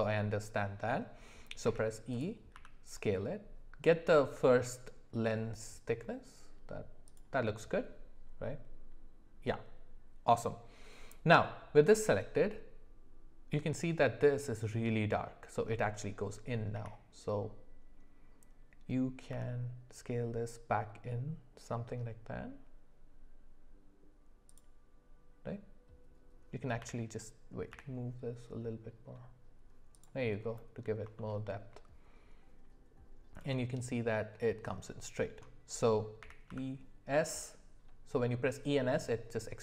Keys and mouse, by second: 1.6 e, 2.5 s, 16.7 e, 26.8 g, 31.2 shift+middle click, 36.2 e.